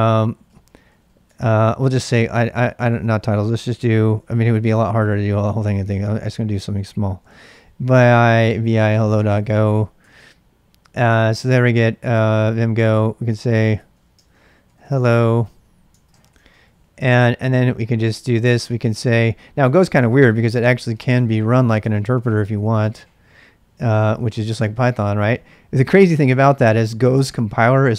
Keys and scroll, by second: 0.0-17.2 typing, 9.9 Return, 15.4 ctrl+[, 19.7-22.7 typing, 22.8 Tab, 23.7 Return.